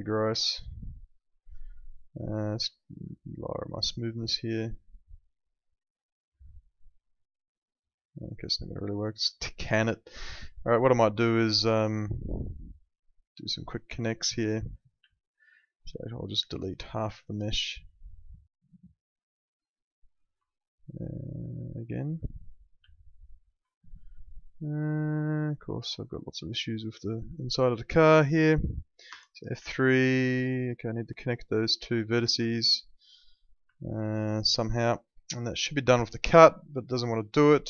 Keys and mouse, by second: 1.9 click, 9.3 click, 9.8 alt+middle click, 11.3 alt+middle click, 12.4 alt+middle click, 15.1 alt+middle click, 15.9 alt+middle click, 16.6 alt+middle click, 17.2 alt+middle click, 18.6 alt+middle click, 20.4 alt+middle click, 22.2 alt+middle click, 22.8 alt+middle click, 23.6 alt+middle click, 25.7 click, 26.5 alt+middle click, 27.8 alt+middle click, 29.1 F3, 29.7 alt+middle click, 33.7 alt+middle click, 35.9 click.